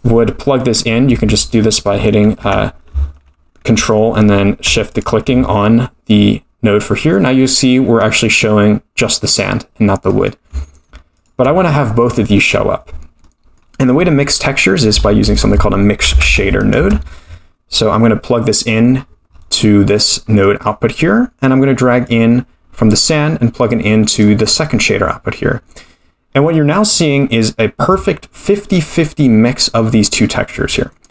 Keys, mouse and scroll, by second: 5.0 ctrl+shift+click, 10.1 middle click, 11.2 ctrl+shift+click, 13.2-14.2 middle drag, 15.0 shift+a, 19.0-19.7 scroll up 11, 19.6 middle click, 20.1-20.5 scroll down 2, 20.4-22.1 middle drag, 22.1-24.3 drag, 24.5 middle click, 25.6-26.5 scroll up 1, 26.5-27.6 scroll up 3, 30.0-30.9 middle drag.